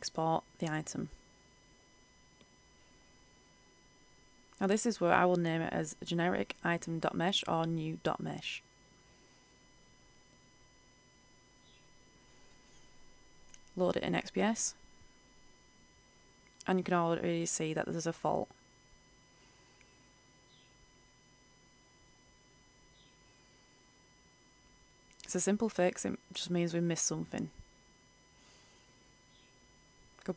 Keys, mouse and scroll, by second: 18.5 scroll down 1, 19.7-21.1 right drag, 21.1-21.9 scroll down 1, 21.9 right click, 22.7 click, 28.8 ctrl+alt+F10, 29.6 click.